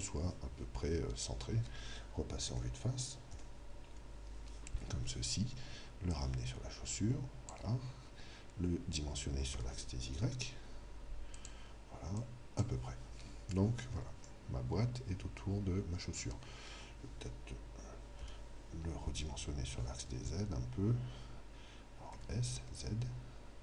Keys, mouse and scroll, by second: 2.4 KP_1, 3.4 KP_2, 3.9 KP_3, 6.1 click, 9.5 s, 11.4-13.9 drag, 13.5-16.1 middle drag, 18.3 KP_3, 22.1 s.